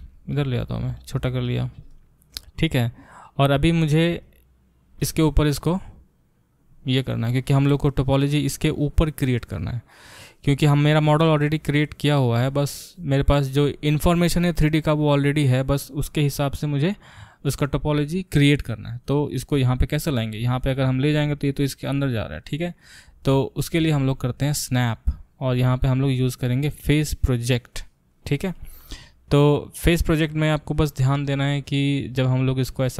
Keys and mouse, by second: 0.0 g, 0.8 s, 26.0-32.9 drag.